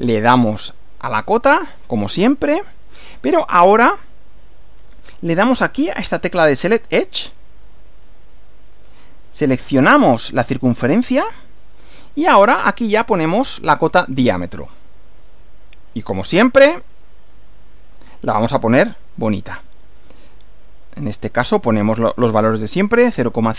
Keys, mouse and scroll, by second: 1.0 click, 7.2 click, 11.1 click, 14.6 click, 17.6 click, 18.8-19.6 drag, 20.5 click, 21.5 click, 22.5-23.5 typing.